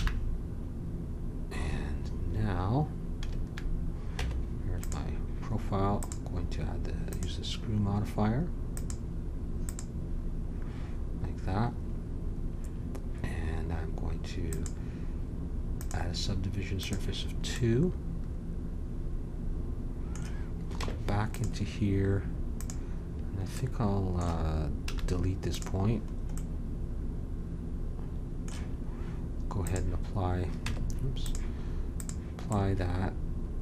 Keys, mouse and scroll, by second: 3.3 a, 4.2 Tab, 8.7-11.0 drag, 14.4-16.4 drag, 16.8-18.6 drag, 20.8 Tab, 22.5-24.7 drag, 24.7 middle click, 24.8 x, 29.6-30.6 drag, 30.6 Tab, 32.5-33.6 middle drag.